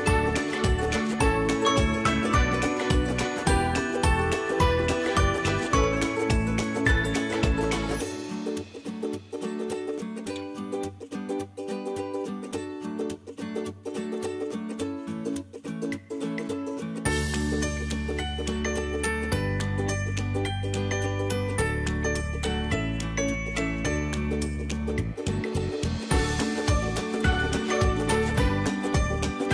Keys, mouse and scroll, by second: 0.2 click, 3.5-25.2 drag.